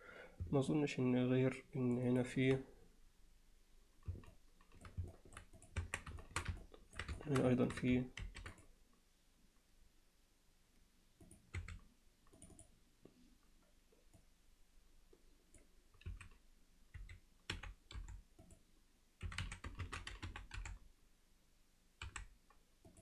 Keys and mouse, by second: 0.7-2.0 alt+middle drag, 2.1 alt+middle click, 4.3-4.9 alt+middle drag, 5.1 alt+middle click, 5.7 click, 5.9 Tab, 6.2 alt+shift+middle click, 6.6 ctrl+alt+middle click, 7.2 alt+shift+middle click, 7.6 ctrl+alt+middle click, 8.2 ctrl+r, 12.6 click, 14.3-15.6 drag.